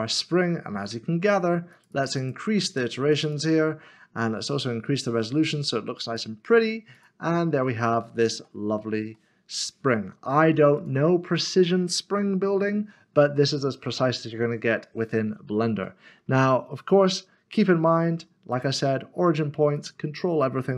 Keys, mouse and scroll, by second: 1.7 middle click, 1.9 double click, 7.2 click, 7.7 shift+middle click, 8.7-9.1 scroll down 1, 9.7 middle click, 13.3 click, 13.5 middle click, 15.5 scroll up 1, 19.7 click.